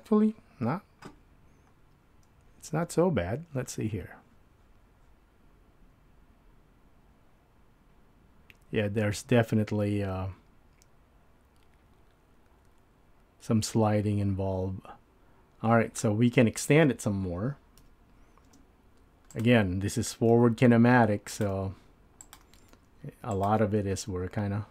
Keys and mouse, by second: 17.8 KP_7, 18.6 space, 20.3 e, 21.6 e, 22.6 e, 24.1 e.